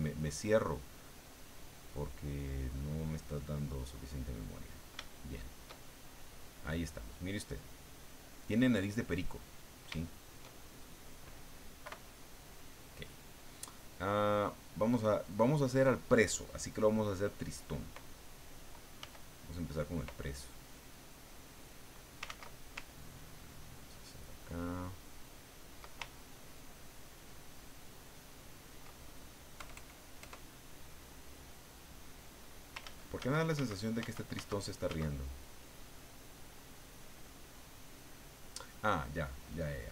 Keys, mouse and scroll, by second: 2.1-5.0 drag, 5.1-6.3 shift+drag, 6.6-9.7 drag, 10.0 shift+click, 10.8 shift+click, 11.8 KP_Subtract, 19.0 f, 19.7 click, 21.1 click, 22.2 ctrl+z, 23.1-25.9 ctrl+drag, 26.0-28.7 ctrl+drag, 29.6 KP_Add, 30.8-32.8 drag, 32.8 ctrl+z, 35.3 ctrl+click.